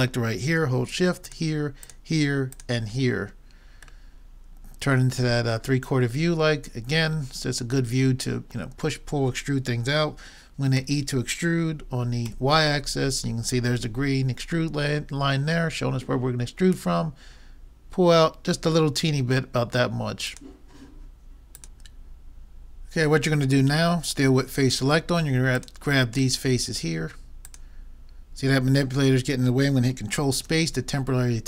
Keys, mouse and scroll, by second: 4.5-5.9 middle drag, 10.8 e, 25.6-27.2 drag, 27.2 middle click, 27.5-29.2 drag, 30.4 ctrl+space.